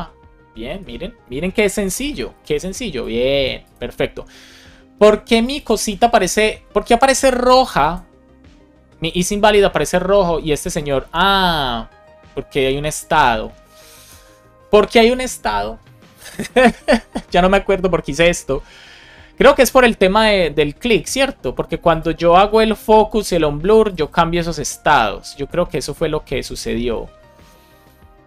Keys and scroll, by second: 1.8 alt+shift+f, 2.3 super+s.